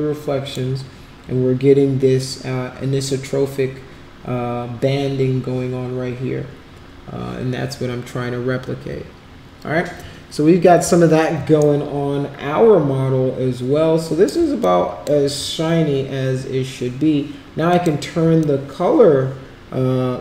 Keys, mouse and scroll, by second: 11.7-14.4 shift+right drag, 14.6 alt+click, 17.7 click, 18.4-20.2 alt+drag.